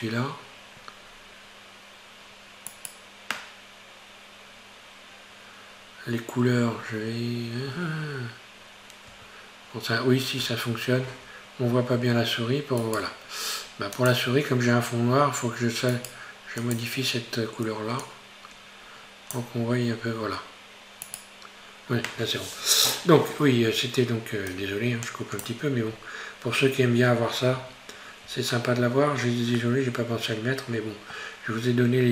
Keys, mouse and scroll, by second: 1.5-1.8 scroll down 2, 1.8-2.2 scroll up 1, 2.7 right click, 9.1 Tab, 10.4 Tab, 11.2 Tab, 12.8-16.1 right drag, 16.6 click, 20.0-20.4 scroll up 2, 20.4-21.1 scroll down 1, 21.1 right click, 24.5-25.9 drag, 25.9-26.3 scroll up 2, 27.6 Tab, 28.6-31.5 shift+middle drag, 31.5-32.1 scroll up 1.